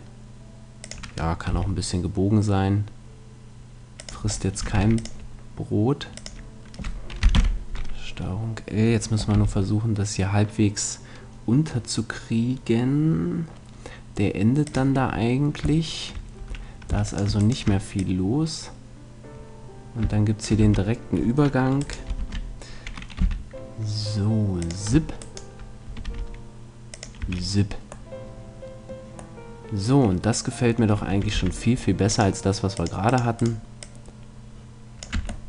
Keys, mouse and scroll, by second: 0.9-2.7 drag, 1.5 g, 4.1 click, 4.7 ctrl+r, 7.3 ctrl+l, 9.3 g, 15.1-16.5 drag, 16.4 a, 17.1-19.3 right drag, 18.0-19.6 drag, 20.6 a, 21.8-23.5 right drag, 22.2 ctrl+l, 23.2 g, 24.7 click, 26.1 r, 27.2 a, 27.2-28.6 drag, 28.1 middle click, 28.7 click, 29.7-31.1 middle drag, 31.3 c, 33.4-35.3 right drag, 33.8-35.4 drag, 35.1 Tab.